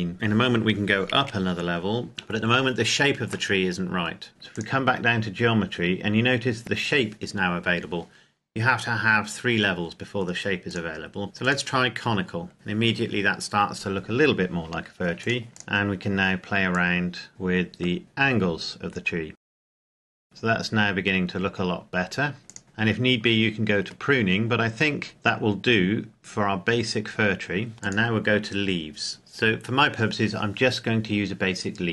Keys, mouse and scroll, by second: 1.1 KP_1, 2.1-3.2 scroll down 1, 3.4 shift+middle click, 4.3 click, 10.6 click, 15.2 click, 19.8 click, 21.1-22.4 scroll up 1, 23.0-24.8 scroll down 1, 25.1 middle click, 27.7 click, 29.6-30.1 scroll up 1.